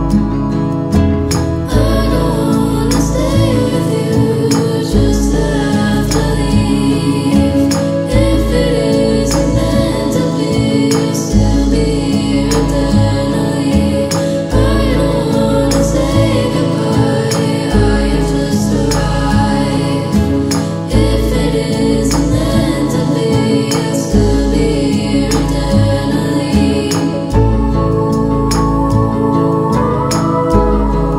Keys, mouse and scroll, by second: 1.6 scroll down 1, 2.6-4.2 drag, 4.4 scroll down 1, 7.7-9.3 drag, 11.7 click, 13.2-14.2 scroll up 1, 14.2-14.8 middle click, 15.0-16.0 scroll down 1, 16.8-22.1 drag, 24.0 v, 24.4-26.4 drag.